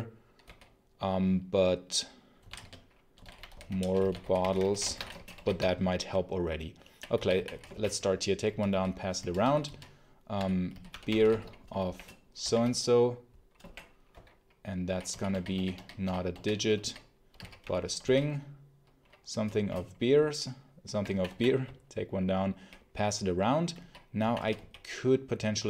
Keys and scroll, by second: 0.3 i, 2.0-6.0 typing, 7.0 j, 8.4-18.4 typing, 19.5 shift+4, 20.5-22.0 typing, 23.4-24.8 typing.